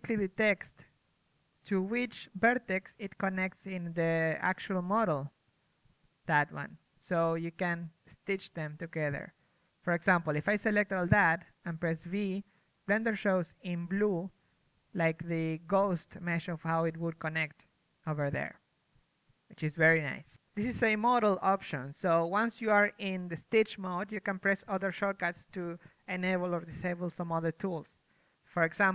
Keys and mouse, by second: 3.2 v, 6.8 middle click, 10.5-13.3 middle drag, 10.5 v, 17.7-21.1 middle drag, 21.1-28.8 drag, 28.8 middle click, 28.8 click.